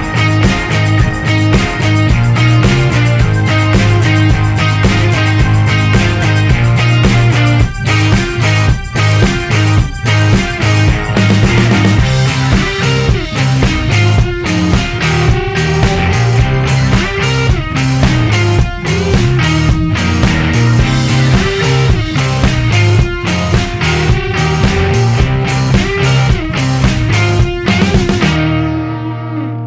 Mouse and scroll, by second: 1.0 click, 2.3 click, 2.6 right click, 4.6 click, 6.1 click, 7.1 right click, 8.1-9.7 right drag, 10.3 right click, 11.7 click, 12.4-17.9 right drag, 22.1-24.6 middle drag, 24.6 right click, 26.8 right click, 28.1-29.3 right drag.